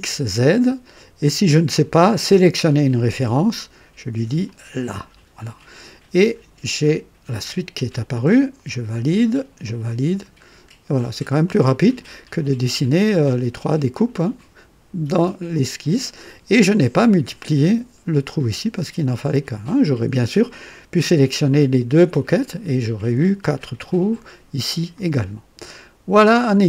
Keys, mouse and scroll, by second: 3.1 click, 4.4 click, 8.5 click, 9.6 click, 10.4 scroll down 1, 11.4 click, 15.5-16.4 drag, 25.7-26.5 drag.